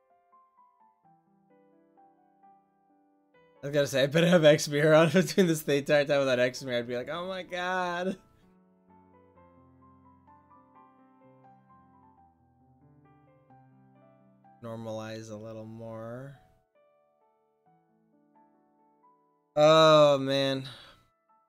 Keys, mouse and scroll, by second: 4.4 click, 4.7-9.7 middle drag, 10.3-13.2 drag, 13.2-14.4 middle drag, 19.2-20.4 drag.